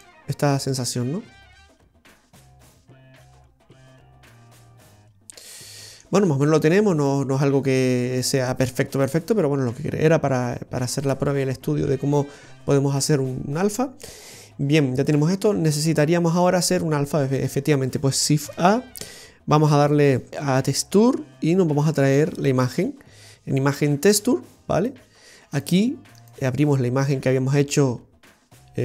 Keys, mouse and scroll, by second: 0.2 middle click, 6.6 scroll down 1, 7.1 middle click, 7.1-7.5 scroll down 3, 9.3 scroll up 1, 11.0 middle click, 11.0-12.0 scroll down 2, 14.8 click, 15.5-16.3 scroll down 4, 16.1 middle click, 18.5 shift+a.